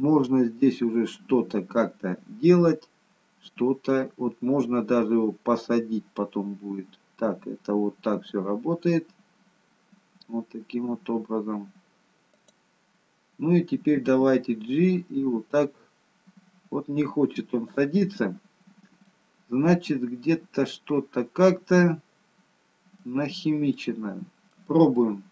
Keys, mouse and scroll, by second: 14.0 g, 18.4-19.1 scroll up 3, 18.9 middle click, 23.2-23.7 scroll down 1, 23.7 middle click, 24.8 middle click.